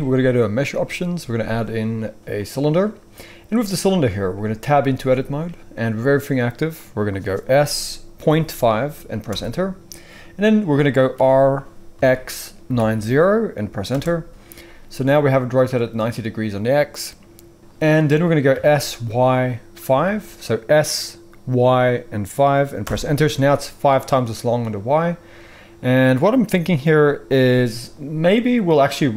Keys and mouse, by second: 4.8 Tab, 7.6 s, 11.1 r, 18.4 s.